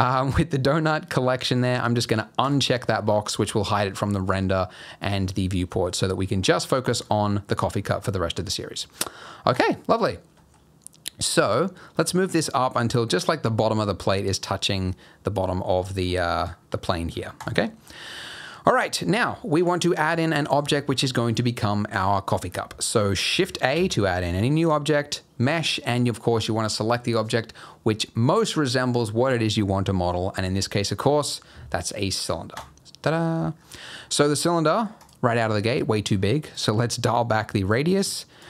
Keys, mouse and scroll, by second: 1.5 click, 2.4 click, 5.5 middle click, 6.1 scroll up 2, 6.3 middle click, 6.6-7.2 scroll down 9, 7.1 middle click, 7.7-9.0 scroll up 6, 8.2 middle click, 9.0-9.3 scroll down 2, 9.5 click, 9.8 scroll up 1, 9.8 middle click, 10.2 g, 14.7 middle click, 14.9-15.7 scroll down 2, 15.7-16.4 scroll down 6, 16.3 click, 16.9-17.3 scroll up 8, 17.3 click, 17.6 middle click, 17.9-18.3 scroll up 2, 18.1 middle click, 18.3-18.8 scroll down 2, 18.8 middle click, 20.1 middle click, 20.3 scroll up 2, 20.7 shift+middle click, 22.4-23.1 scroll down 5, 23.7 shift+a, 33.2-34.2 scroll down 10, 33.8 middle click, 34.9 click, 36.5 click.